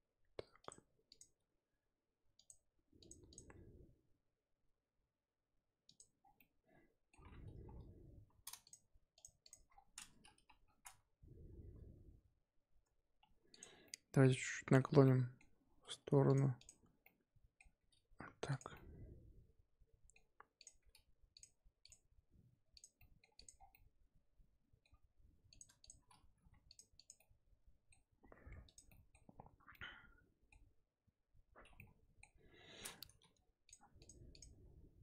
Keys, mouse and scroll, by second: 1.1 click, 1.3 g, 3.0 click, 3.3 click, 3.5 g, 6.2 scroll down 4, 6.3-7.1 middle drag, 7.1-8.6 scroll up 1, 8.6 shift+click, 9.1 shift+click, 9.4 shift+click, 9.7-10.1 scroll down 4, 10.1-12.8 scroll up 4, 10.3 KP_1, 12.8 Tab, 13.2 Tab, 13.5 click, 13.8-15.7 middle drag, 15.7 r, 16.5 click, 16.9 scroll up 1, 17.0-17.7 middle drag, 17.7 r, 18.7-20.5 middle drag, 20.5 click, 20.8 r, 21.8 click, 22.1 r, 22.9-23.3 middle drag, 23.3 click, 23.5 scroll down 5, 23.7-24.8 middle drag, 24.8-25.5 scroll up 1, 25.5 click, 25.8 shift+click, 26.3 g, 26.9 click, 27.1-28.6 middle drag, 28.6 click, 28.9 middle drag, 29.2-29.7 scroll up 2, 29.7-31.7 middle drag, 31.7 scroll down 1, 31.7-32.3 middle drag, 32.3 KP_7, 33.2 g, 34.0 click, 34.3 click, 34.5 g.